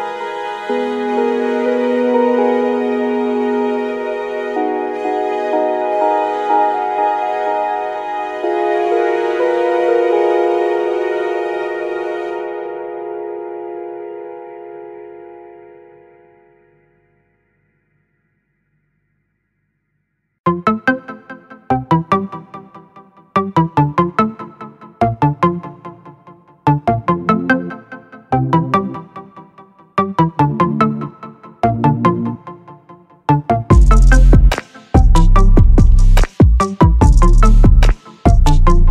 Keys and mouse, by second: 0.3 click, 9.7 click, 11.6-13.1 drag, 19.2 middle click, 21.4-23.6 drag, 25.6 click, 26.5-27.4 middle drag, 30.0 click, 30.4 right click, 31.7 click, 33.0 click, 35.3 click, 36.1 click, 37.4 click, 38.6 click.